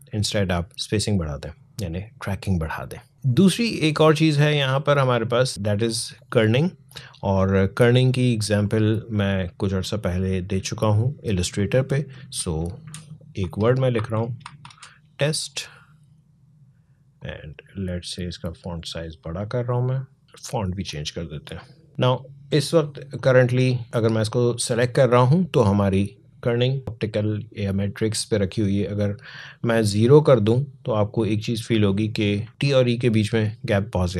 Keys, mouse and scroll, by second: 8.7-12.0 drag, 12.6-15.0 typing, 17.0-21.9 drag, 21.9 alt+scroll down 1, 23.0-25.3 drag, 26.8 click, 30.0 click, 32.3 alt+scroll up 1.